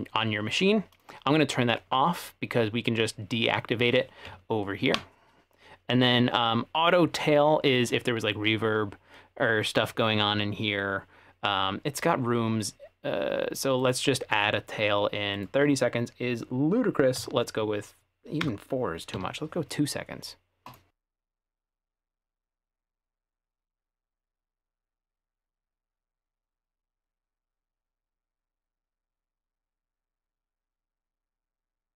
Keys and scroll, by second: 17.2 4, 18.5 BackSpace, 19.2 2.